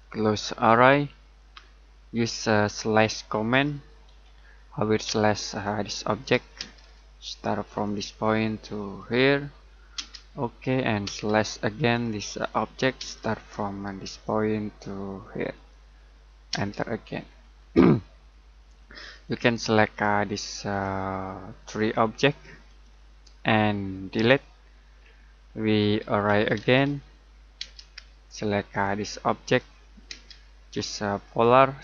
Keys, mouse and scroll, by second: 1.8 scroll up 1, 2.6 middle click, 3.5 s, 5.0 space, 5.5 click, 6.6 space, 6.9-7.8 scroll up 1, 7.8 click, 9.9 space, 11.9 click, 13.0 space, 14.0 click, 16.5 space, 17.2-18.0 scroll down 1, 18.0 middle click, 19.2 click, 24.1 Delete, 25.0-25.4 scroll up 1, 25.4 middle click, 25.7-27.6 typing, 28.7 click, 30.1 space, 31.2 click.